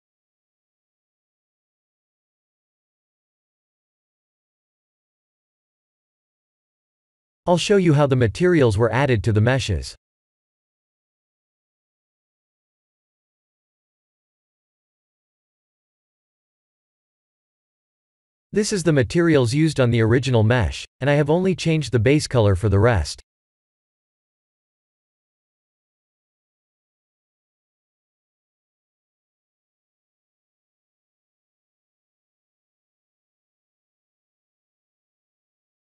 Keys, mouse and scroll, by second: 0.8-1.8 scroll up 1, 2.1 click, 4.4 click, 9.1 click, 10.6 click, 13.6 click, 15.0 click, 16.9 KP_Decimal, 17.7 scroll down 1, 17.7 scroll up 2, 18.4 ctrl+space, 19.0-19.8 scroll up 2, 19.8-20.8 scroll down 1, 30.3 ctrl+space, 32.2 middle click, 33.7 click, 34.6-35.3 scroll up 9, 35.4 shift+middle click.